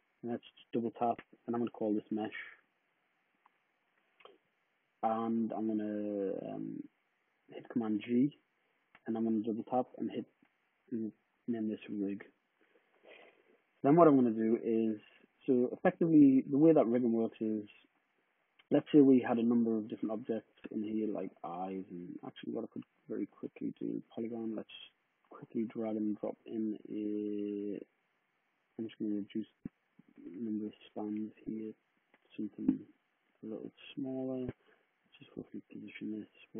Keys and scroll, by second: 2.0-3.3 typing, 7.7 super+g, 9.4-10.4 typing, 11.6 Return, 24.0 w, 30.0-31.8 typing, 33.3-36.2 typing.